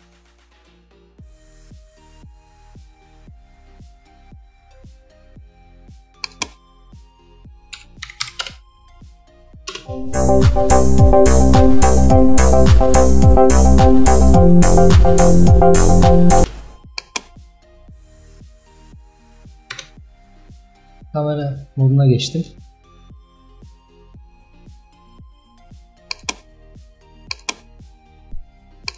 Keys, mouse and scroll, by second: 8.5-9.8 drag, 9.8 space, 16.5 space, 17.0-19.4 drag, 19.4 KP_0, 20.2 KP_0.